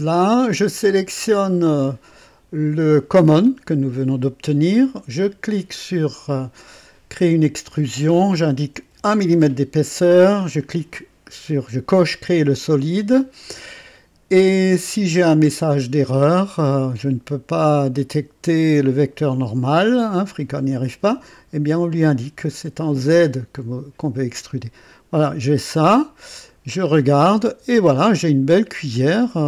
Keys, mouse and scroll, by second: 0.0 scroll up 2, 1.2 click, 5.6 click, 8.8 KP_1, 10.4 click, 16.1 click, 20.2 click, 21.6 click, 23.5 click, 25.1 scroll up 2, 25.7-26.5 scroll down 4, 26.8-28.1 drag, 28.9-29.4 drag.